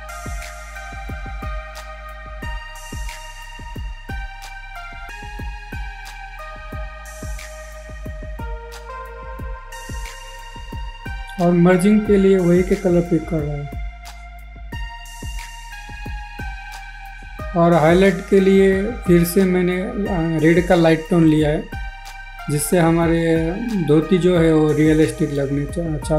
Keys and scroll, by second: 13.1 ctrl+z, 16.4 ctrl+z, 19.8 ctrl+z, 23.4 ctrl+z.